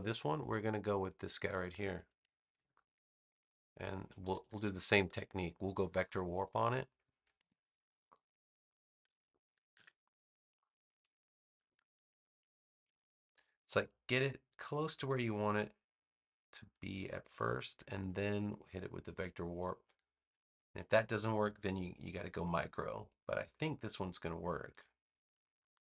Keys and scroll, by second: 2.4 super+c, 4.1 super+=, 5.3 space, 7.4 super+=, 8.1 space, 9.7 super+v.